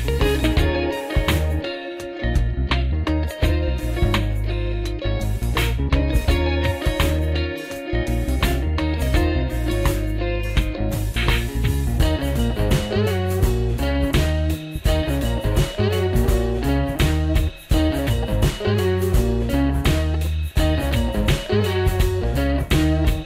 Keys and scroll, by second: 3.8 alt+q, 7.9 super+Return, 9.6 super+Return, 11.5 super+Return, 13.5 shift+super+Down, 15.3 super+Up, 16.2 super+Left, 17.0 super+Down, 17.7 super+Right, 18.5 super+Up, 19.9-20.7 typing, 21.1 super+Right, 21.8-23.2 typing.